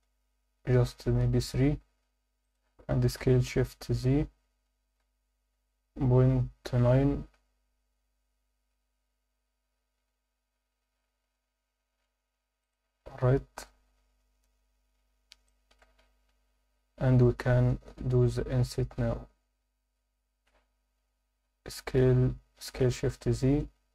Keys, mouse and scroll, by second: 0.0 e, 1.4 3, 2.4 click, 3.2 s, 4.7 shift+z, 6.3 ., 6.8 9, 12.6 click, 13.2 KP_7, 13.7 scroll up 1, 15.2 scroll up 1, 15.5 alt+shift+middle click, 22.5 s, 22.9 shift+z.